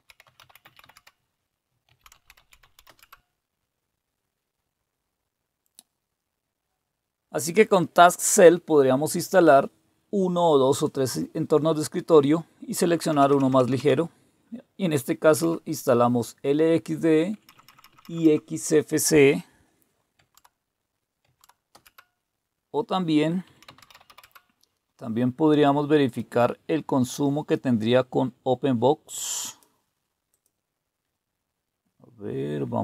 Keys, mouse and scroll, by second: 0.0-3.3 typing, 12.9 Down, 13.1-13.6 typing, 15.3 typing, 17.3-17.7 typing, 17.9 Up, 20.2 Tab, 21.2 Tab, 21.7 Return, 23.2-24.6 typing, 26.1 click, 29.4 click, 30.3 click.